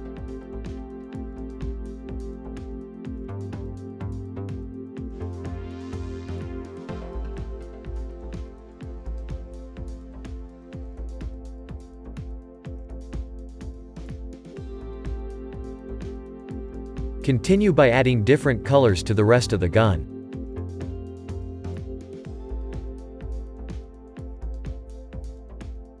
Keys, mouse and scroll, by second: 1.4 shift+middle click, 2.3 shift+click, 2.4 shift+click, 3.4 middle click, 4.0-4.8 scroll down 1, 4.8 scroll down 1, 5.9-10.7 drag, 10.7 Tab, 11.2 click, 11.5-12.0 scroll down 5, 12.0-13.1 shift+middle drag, 13.1 scroll down 2, 13.6-17.9 middle drag, 17.9-18.6 scroll up 2, 18.6 click, 20.8-21.4 drag, 21.4-22.1 middle drag, 22.1 click, 24.3-25.0 drag, 25.5-26.0 scroll down 3.